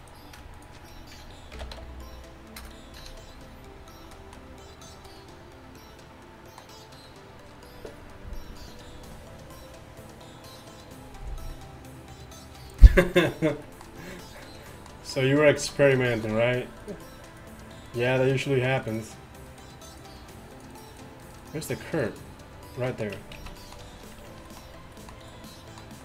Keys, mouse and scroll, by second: 1.6 ctrl+l, 3.1 a, 15.6 z, 17.0-18.0 middle drag, 18.0-20.2 right drag, 20.7 right click, 21.4 click, 22.9 click, 23.4 z, 24.3 Tab.